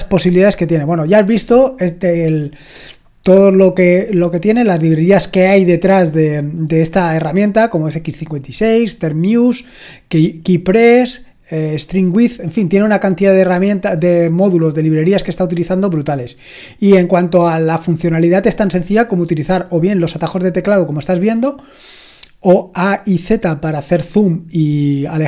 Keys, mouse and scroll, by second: 0.9-2.3 scroll up 1, 2.3 scroll down 1, 2.6 scroll up 1, 2.8-3.5 scroll down 1, 3.5-7.4 scroll up 1, 11.6-13.1 scroll down 2, 13.1-13.5 scroll down 1, 13.5-16.8 scroll up 2.